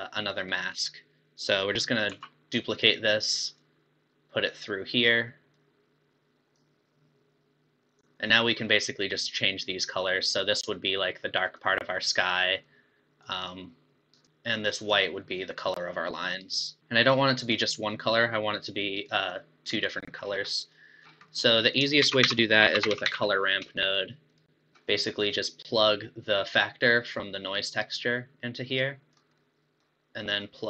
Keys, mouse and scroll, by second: 1.3 click, 2.1 shift+d, 3.6 click, 5.6 click, 8.0-11.0 drag, 11.4 click, 14.8 click, 16.9 scroll up 4, 17.5 click, 19.8 click, 20.3 scroll down 5, 20.5 middle click, 21.0-21.3 scroll down 6, 21.3 middle drag, 21.6 click, 22.1 shift+a, 24.7-27.2 middle drag, 27.2 click, 29.4-30.6 middle drag.